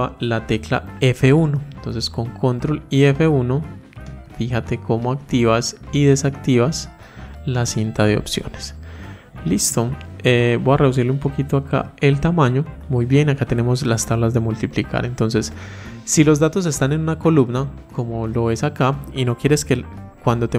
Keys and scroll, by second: 1.8 ctrl+F1.